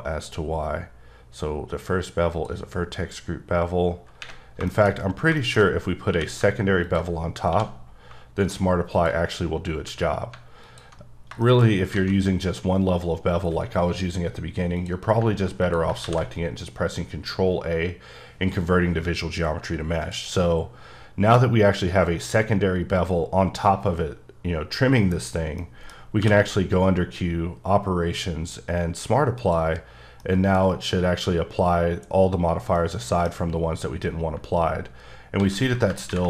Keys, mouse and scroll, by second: 2.3 click, 4.7 shift+middle click, 4.9-6.1 shift+scroll up 8, 5.4 shift+middle click, 6.1 q, 6.8 ctrl+click, 7.5 1, 8.9 shift+click, 9.2-9.8 scroll down 1, 9.8 q, 10.6 alt+click, 11.1-11.9 scroll down 4, 11.4 middle click, 12.0 a, 15.2 click, 16.0 a, 20.0 click, 25.6 click, 25.7 middle click, 26.2 q, 30.2 middle click, 30.8-32.8 scroll up 1, 32.8 middle click, 35.4 ctrl+z.